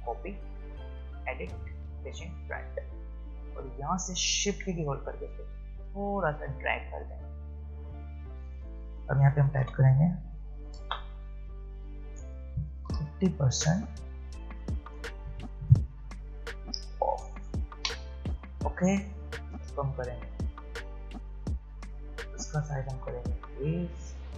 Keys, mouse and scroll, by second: 5.3-8.3 shift+drag, 12.9 shift+5, 14.9 Return, 16.2-16.9 typing, 20.4 click, 23.8-24.3 alt+shift+drag.